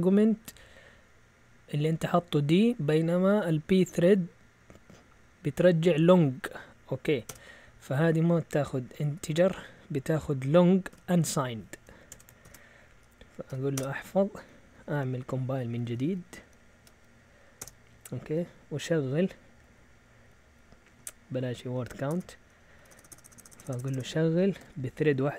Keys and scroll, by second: 7.3 Return, 8.8 a, 9.2 BackSpace, 10.5-10.9 typing, 12.1 Escape, 12.2-13.5 typing, 13.7 Return, 14.4 Up, 14.6 Up, 14.8 Up, 15.2 Up, 15.4 Up, 15.4-24.5 typing.